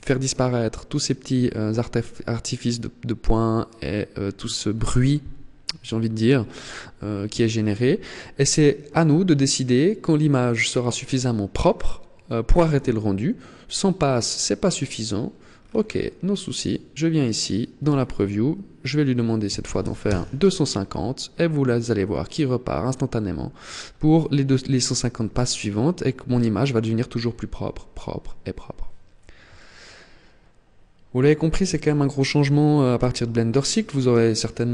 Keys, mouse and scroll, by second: 14.5 click, 14.9-15.5 scroll down 6, 15.5-16.0 scroll down 1, 16.2 click, 17.1 click.